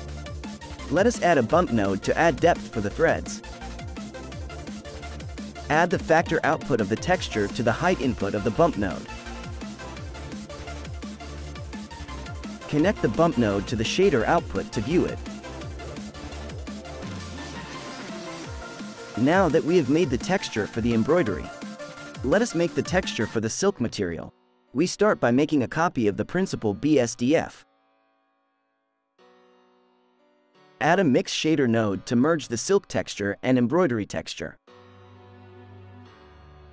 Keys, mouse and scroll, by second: 2.6-3.2 scroll up 3, 3.2 middle click, 3.4-4.1 scroll up 2, 4.1 click, 5.3 click, 6.8 click, 10.7 ctrl+shift+click, 13.4-14.5 middle drag, 14.5-15.3 scroll up 5, 15.3-16.2 scroll down 1, 16.2-17.5 middle drag, 17.5 KP_7, 18.8-20.2 scroll down 10, 20.2-23.1 middle drag, 23.1 click, 24.2 shift+d, 27.4-28.5 middle drag, 28.5 click, 29.3 click, 29.7 shift+a, 32.7 Right, 33.7 Down, 36.3-36.7 scroll up 2.